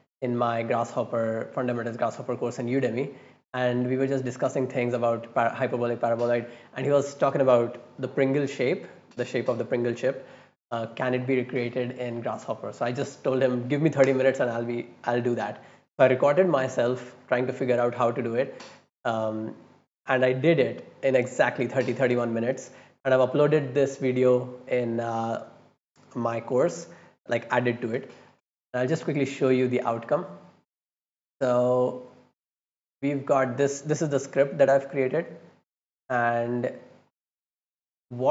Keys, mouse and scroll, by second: 29.6 scroll down 2, 30.2-30.8 scroll up 4, 31.2-31.7 middle drag, 31.9 click, 32.3 scroll down 2, 33.0 scroll up 2, 33.6 scroll down 2, 36.4-36.7 scroll down 2, 37.0 middle click, 38.2 click.